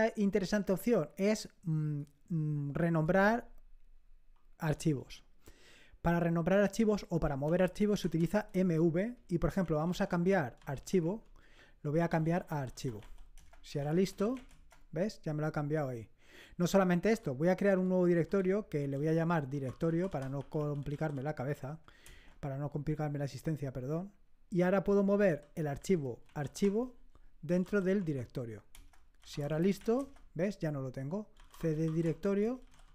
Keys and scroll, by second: 7.5-10.6 typing, 11.0 Tab, 11.7-14.8 typing, 17.1-21.5 typing, 22.1 Return, 25.1-32.9 typing.